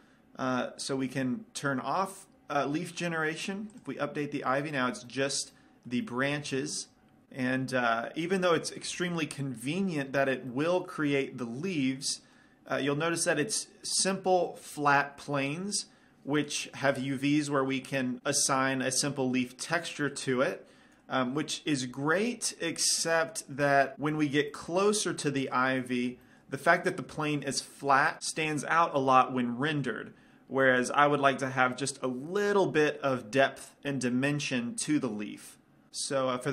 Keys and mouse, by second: 0.9-2.6 drag, 2.6-4.0 middle drag, 4.0-5.7 drag, 5.7-7.2 middle drag, 7.6-10.6 middle drag, 11.0-12.1 middle drag, 12.2 middle click, 13.2-14.8 middle drag, 22.9-23.9 middle drag, 24.2-28.2 middle drag, 30.7-36.5 middle drag.